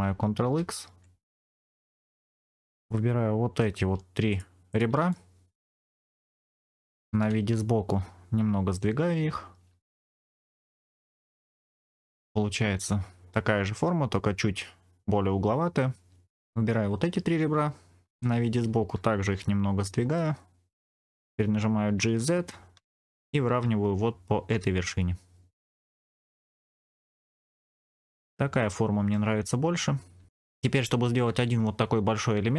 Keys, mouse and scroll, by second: 0.3 ctrl+x, 1.7 right click, 2.3 click, 2.8 middle click, 4.2 shift+click, 4.6 shift+click, 5.0 middle click, 7.1 KP_1, 9.5 g, 11.4 click, 11.8-13.3 middle drag, 11.8-12.3 scroll down 3, 16.3 ctrl+z, 16.3 middle click, 18.1 KP_1, 20.0 g, 20.8 click, 21.8 g, 21.9 z, 25.7 ctrl+click, 26.2 middle click, 27.2 Tab, 27.4-27.9 scroll down 3, 27.5-29.1 middle drag, 29.4-29.8 scroll up 2, 30.1 Tab.